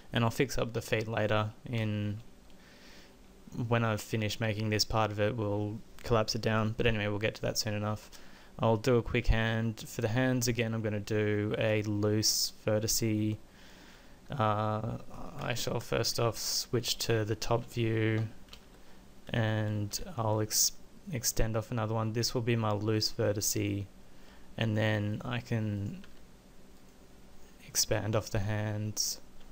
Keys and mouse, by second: 7.7-8.9 middle drag, 15.5 KP_1, 15.5 KP_4, 15.9 KP_7, 18.6 w, 19.9 e, 24.2 e, 26.1 e.